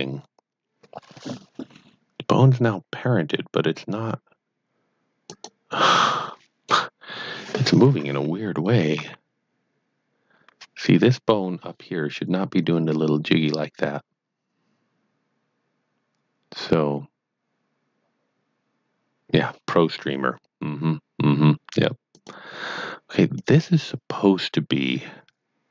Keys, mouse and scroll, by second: 5.3 shift+right click, 7.9 shift+KP_1, 9.0 shift+r, 22.1 shift+right click, 23.3 shift+click.